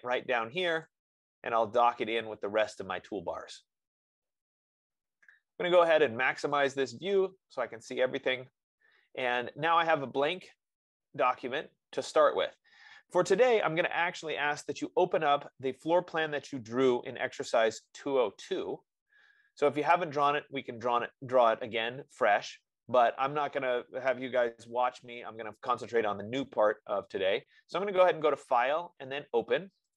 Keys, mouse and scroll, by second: 0.0 click, 5.1-6.2 drag, 7.5 click, 8.1-12.2 drag, 28.7-29.9 drag.